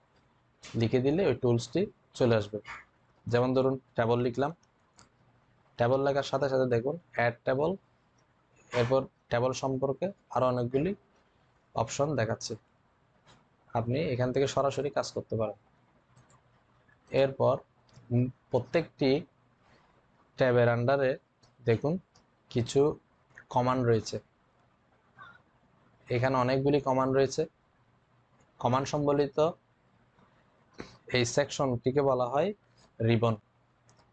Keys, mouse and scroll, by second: 17.0 click.